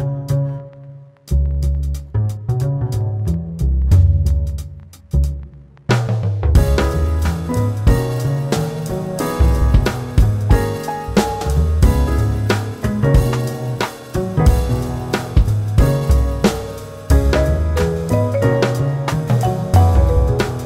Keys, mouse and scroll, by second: 0.0 q, 2.3 q, 4.5 q, 6.9 q, 9.1 q, 13.2 q, 14.8 q, 15.1 q, 15.9 q, 16.8 q, 19.2 click.